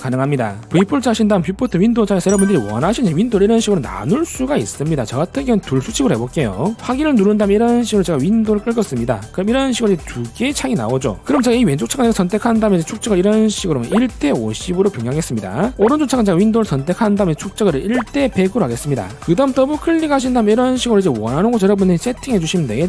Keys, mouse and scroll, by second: 3.9 click, 4.3 click, 4.7 click, 6.3 click, 7.4 click, 8.4 click, 9.7 click, 13.0 click, 13.8 click, 15.3 click, 17.1 click, 17.9 click, 18.9 click, 19.9 click, 20.1 click, 20.6 middle click, 21.1 middle click, 21.5 middle click, 22.1 middle click.